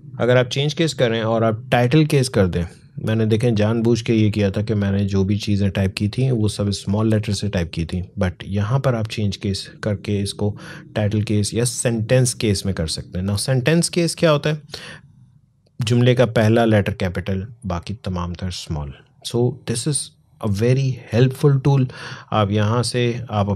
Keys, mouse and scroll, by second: 8.4 click, 11.5 click, 19.1 click.